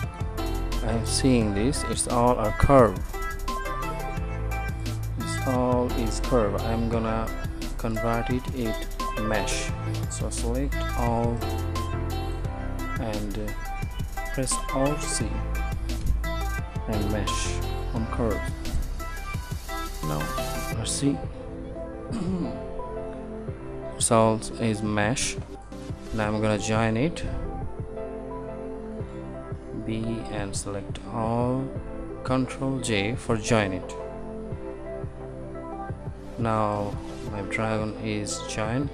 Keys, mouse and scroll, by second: 2.2 Tab, 3.8 Tab, 4.4 Tab, 5.3 Tab, 5.9 Tab, 6.4 Tab, 8.1 a, 10.9 a, 11.0 b, 15.7 alt+c, 20.1-20.6 drag, 20.8 click, 21.4 Tab, 23.9 Tab, 27.0 a, 29.8 b, 34.8 ctrl+j.